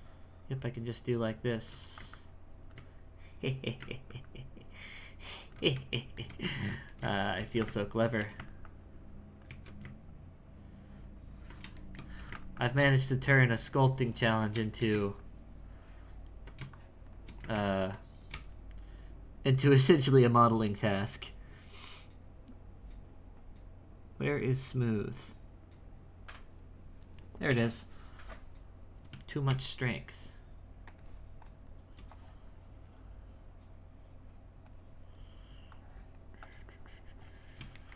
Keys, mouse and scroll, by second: 2.1-6.0 ctrl+drag, 6.0-7.4 shift+middle drag, 7.9 ctrl+click, 8.6 ctrl+click, 9.5 ctrl+2, 10.1-11.8 ctrl+drag, 11.8 shift+middle click, 12.6-14.7 ctrl+drag, 14.7 shift+middle click, 15.2-17.5 ctrl+drag, 17.5 ctrl+z, 18.3 space, 29.5 shift+f, 32.1-35.1 drag, 35.7-37.8 drag, 37.8 shift+middle click.